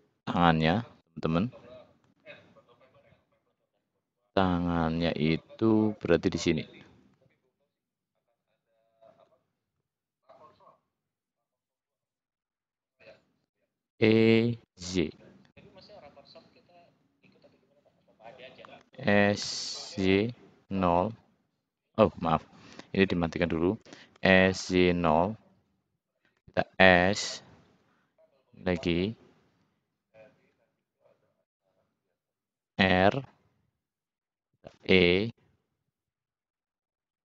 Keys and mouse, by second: 1.6 shift+click, 2.2 shift+click, 4.7-5.9 middle drag, 6.6-7.6 drag, 9.0 shift+click, 11.7 `, 13.8 e, 18.7 s, 24.1 s, 26.2 s, 31.4 r, 32.5 click, 34.6 e, 36.7 click.